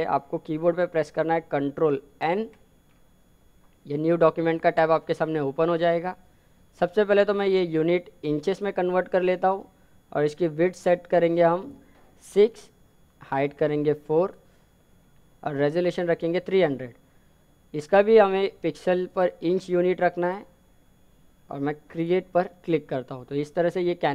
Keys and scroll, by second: 0.5 ctrl+n.